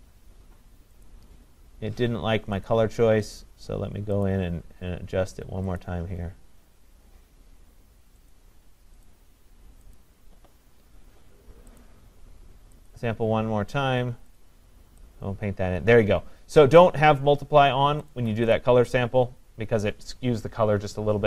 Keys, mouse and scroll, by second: 1.1 click, 2.7 click, 4.3 click, 8.3 click, 9.1 click, 10.0 click, 11.8 click, 12.9 click, 14.4 click, 16.8 click, 18.6 click.